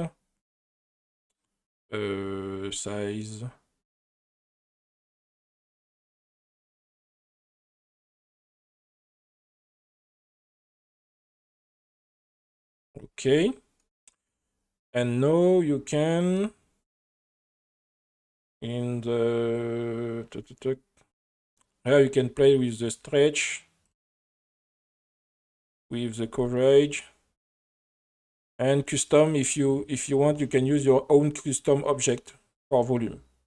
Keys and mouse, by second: 6.6 space, 8.3 click, 10.8-12.6 drag, 13.8 middle click, 17.5 space, 22.0-23.9 drag, 25.1-26.7 drag.